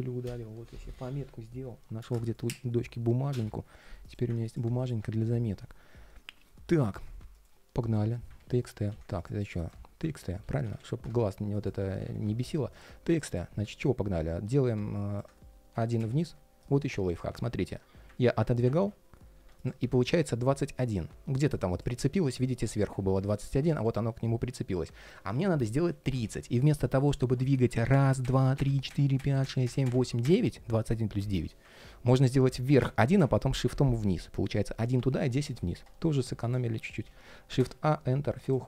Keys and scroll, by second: 8.1 super+r, 8.6 super+z, 9.8 super+r, 17.3 super+z, 18.0 super+z, 18.5 super+z, 22.7 super+z, 31.5 super+z.